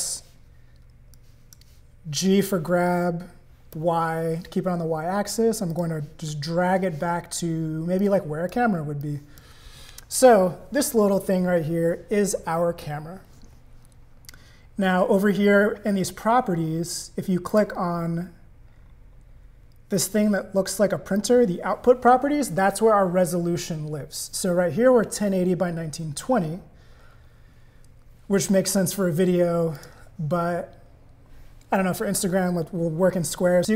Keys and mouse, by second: 1.2 click, 2.5 g, 8.0 click, 9.0 click, 17.5 click, 21.2 click, 29.8-33.7 drag.